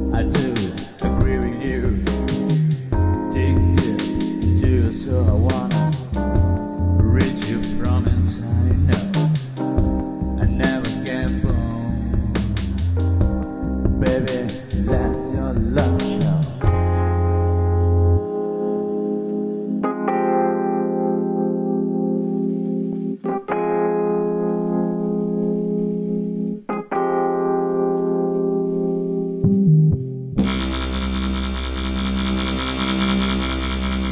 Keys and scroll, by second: 11.4 alt+super+0, 12.0 alt+super+space, 12.7 space, 22.3 space.